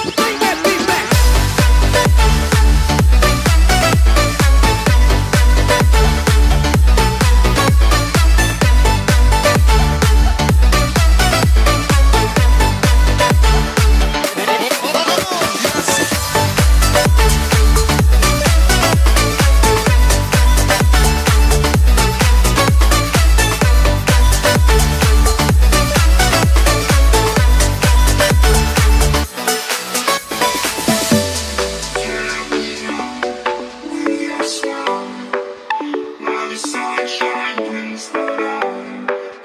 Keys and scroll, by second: 19.3 ].